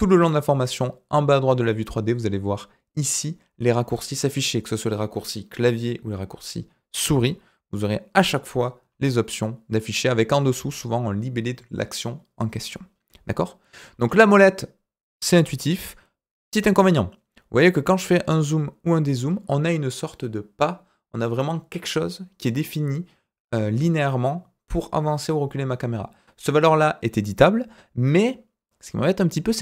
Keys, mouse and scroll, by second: 7.1-8.0 scroll up 4, 8.0 scroll down 2, 8.9 scroll up 3, 13.4 scroll down 2, 13.9 scroll up 3, 15.8-17.6 scroll up 1, 17.6-18.2 scroll up 1, 18.7-19.2 scroll down 1, 19.2-22.3 scroll up 1, 27.7-28.5 scroll down 1, 28.5-29.2 scroll down 1, 29.2-29.6 scroll up 3.